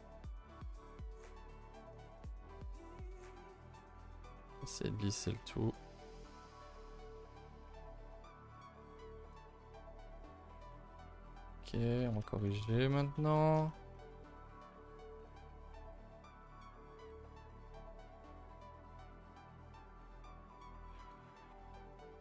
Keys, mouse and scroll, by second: 0.2 g, 0.7 middle click, 0.8 middle click, 1.2 1, 1.4 click, 1.8 shift+click, 2.1 middle click, 4.5 middle click, 4.8 g, 5.4 middle click, 5.6 middle click, 5.8 g, 6.6-7.9 middle drag, 7.9 click, 8.2 g, 9.5 click, 9.7 Tab, 9.8 middle click, 10.3 Tab, 10.5 middle click, 10.8 a, 10.9 a, 11.7 click, 12.0-13.2 typing, 12.2 middle click, 12.7 shift+middle click, 12.9 scroll down 1, 13.3 middle click, 14.2-14.6 scroll down 4, 14.7 middle click, 15.3-15.7 scroll up 1, 15.7 click, 15.9 g, 16.8 click, 16.8 g, 18.0 click, 18.2 g, 19.3 click, 19.5 g, 20.6 shift+middle click, 21.0 scroll up 2, 21.2 a, 21.3 a, 22.0 a, 22.1 a.